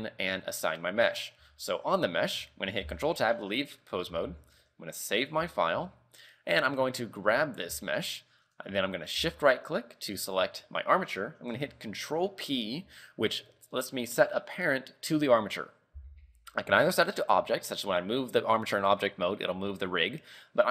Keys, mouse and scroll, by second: 0.5 scroll down 3, 1.1 middle click, 1.5 z, 3.0 ctrl+Tab, 3.3 middle click, 4.0 middle click, 4.4 ctrl+w, 5.6 shift+middle click, 6.8 right click, 7.3 middle click, 8.0 shift+middle click, 8.3 middle click, 10.2 shift+right click, 12.9 ctrl+p.